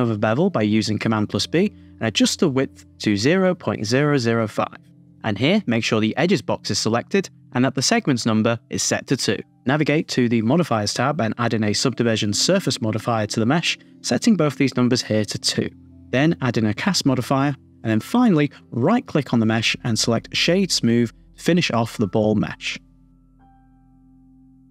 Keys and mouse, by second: 1.3 super+b, 3.6-4.7 drag, 4.3 KP_0, 10.1 click, 10.7 super+z, 11.2 click, 11.6 Tab, 12.2-13.3 drag, 14.2-19.1 drag, 20.2-22.9 right drag, 22.9-24.7 middle drag.